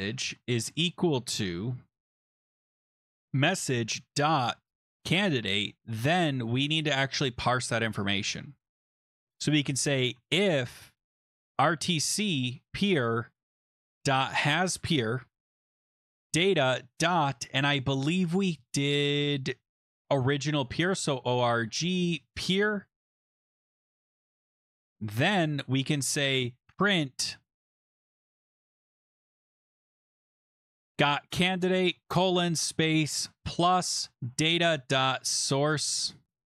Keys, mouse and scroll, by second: 0.0-6.4 typing, 9.9-12.0 typing, 12.4 Tab, 13.6-16.9 typing, 17.7-19.8 scroll, 20.5-23.1 typing, 20.8 click, 24.2 :, 24.3 Return, 24.6 click, 24.7 click, 26.3-36.5 typing.